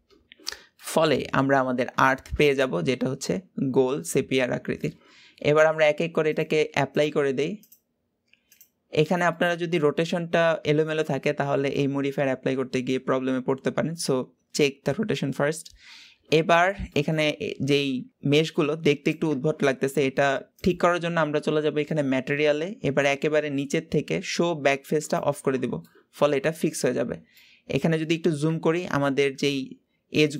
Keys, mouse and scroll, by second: 0.7-1.3 middle drag, 1.3 scroll down 1, 1.5-2.0 scroll up 2, 2.0-5.5 shift+middle drag, 6.2-9.3 drag, 9.3-12.4 middle drag, 16.0-16.8 scroll down 2, 16.8-17.2 middle drag, 17.2-19.5 scroll up 2, 19.5 scroll up 1, 21.2 click, 22.0-22.4 scroll down 12, 25.0 click, 25.6 scroll down 2, 25.8-27.0 middle drag, 27.0-27.3 scroll up 3, 27.4-30.3 middle drag.